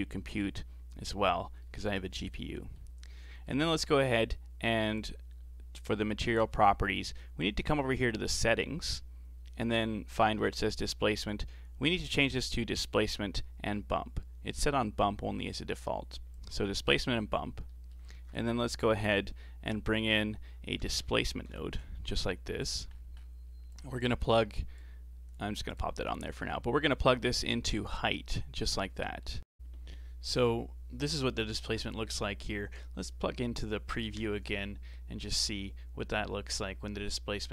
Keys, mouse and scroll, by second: 1.2-1.5 scroll down 4, 1.5-3.1 middle drag, 3.1 scroll down 1, 3.1-4.9 middle drag, 4.9 click, 6.8-7.4 scroll down 4, 11.1-14.3 drag, 17.4 scroll down 4, 17.7 middle click, 18.1 shift+a, 23.0-23.7 scroll up 10, 23.7 click, 24.7 click, 25.7 click, 26.3-27.4 scroll up 4, 27.4-28.4 drag, 28.4-28.8 scroll down 4, 28.8-31.1 middle drag, 31.1 scroll up 3, 31.4 middle click, 32.0 click, 35.8-36.5 scroll down 3, 36.5-37.5 scroll down 3.